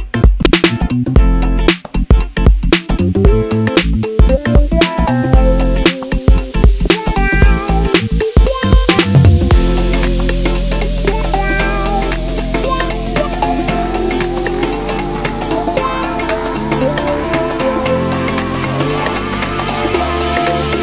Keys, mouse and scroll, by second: 2.2-3.8 middle drag, 3.8 g, 9.2-10.9 middle drag, 10.9 s, 15.4-15.8 scroll up 1, 16.2-19.3 middle drag, 19.6 s.